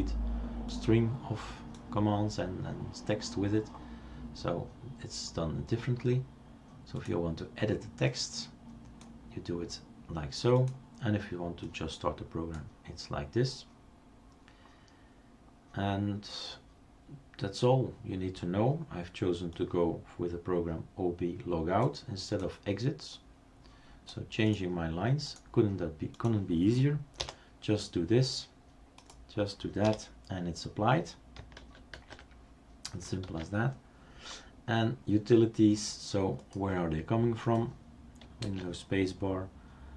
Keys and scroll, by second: 27.2 BackSpace, 29.9 BackSpace, 31.6 ctrl+z, 32.0 ctrl+z, 33.3 ctrl+s, 38.5 super+space.